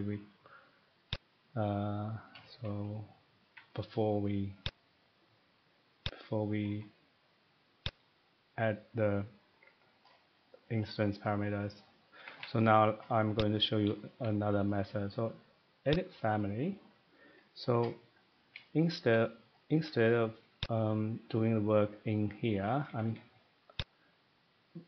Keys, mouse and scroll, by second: 1.2 click, 3.4 scroll down 1, 3.4 Escape, 4.6 click, 6.7 click, 6.8 Escape, 8.0 click, 10.0 scroll, 10.5 middle click, 11.3 middle click, 12.1 Escape, 12.3 Escape, 12.3 scroll, 12.6 scroll down 2, 12.7 middle click, 13.5 click, 15.9 click, 16.4 scroll, 17.7 middle click, 18.5 middle click, 19.0 shift+middle click, 19.7 Escape, 19.9 Escape, 20.6 click, 22.8 middle click, 22.9 Escape, 23.1 Escape, 23.9 click.